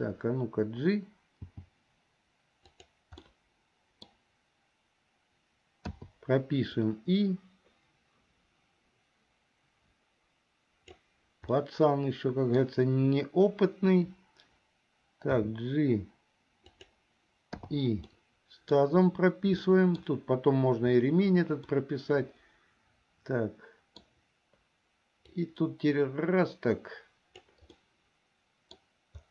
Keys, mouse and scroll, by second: 1.6 g, 3.5 middle click, 6.0 i, 7.0-11.2 drag, 11.7-12.8 middle drag, 15.5 g, 17.8 i, 18.2 middle click, 19.8 middle click, 21.8-24.2 middle drag, 25.5-27.6 drag, 27.9-28.9 middle drag.